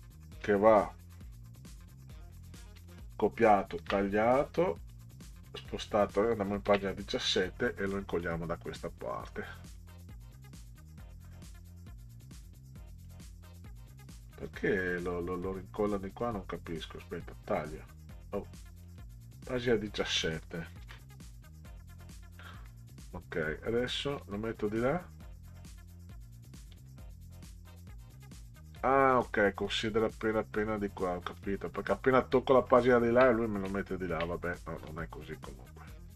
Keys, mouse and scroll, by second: 2.8 ctrl+c, 3.8 ctrl+x, 4.8 click, 5.4 click, 6.7 ctrl+v, 7.9 middle click, 9.7-13.1 drag, 16.1 right click, 17.5 click, 18.9 click, 20.8 ctrl+v, 22.6 middle click, 24.2 click, 26.7-28.2 drag, 29.8 click, 31.4 middle click, 32.8 ctrl+scroll up 2, 33.8 ctrl+scroll up 2, 34.9-36.1 drag.